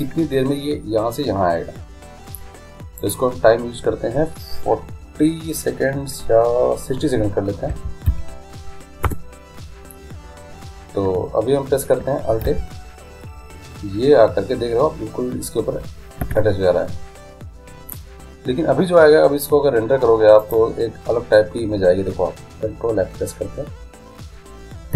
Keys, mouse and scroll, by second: 3.0-4.8 drag, 12.5 alt+a, 16.3 Escape, 20.4-22.2 drag.